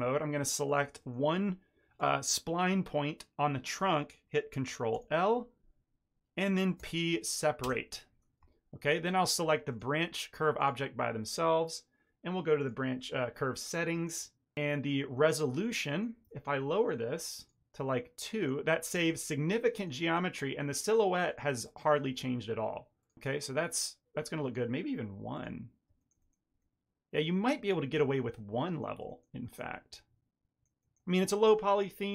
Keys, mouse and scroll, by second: 0.6 click, 0.9 shift+middle click, 1.2 ctrl+middle click, 4.8 ctrl+l, 6.7 p, 8.3 Tab, 8.8 shift+middle click, 9.6 click, 10.5 click, 11.5 ctrl+middle click, 12.5 click, 15.2 ctrl+middle click, 15.5 ctrl+middle click, 15.8 ctrl+middle click, 16.2 shift+middle click, 17.3 click, 17.7 click, 17.7 middle click, 18.7 middle click, 19.6 ctrl+middle click, 20.0 middle click, 21.2 click, 21.5 click, 23.7 ctrl+middle click, 24.1 ctrl+middle click, 24.3 middle click, 25.2 click, 25.9 shift+middle click, 26.1 ctrl+middle click, 26.5 middle click, 27.7 shift+middle click, 28.0 ctrl+middle click, 28.3 middle click, 29.0 shift+middle click, 29.4 shift+middle click, 29.7 ctrl+middle click, 30.7 ctrl+middle click.